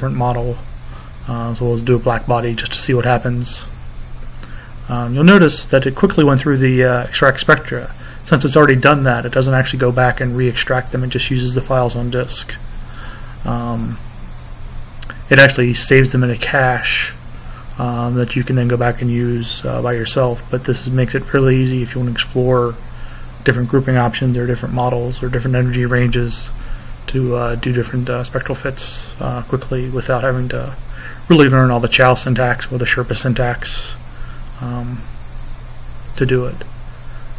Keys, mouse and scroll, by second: 0.7 click, 2.2 click, 11.9 click, 13.8 click, 17.2-20.0 drag, 21.5-22.8 drag, 23.0 click, 24.8-27.7 drag, 28.9 click, 31.9 click, 33.0 click, 36.2-37.3 drag.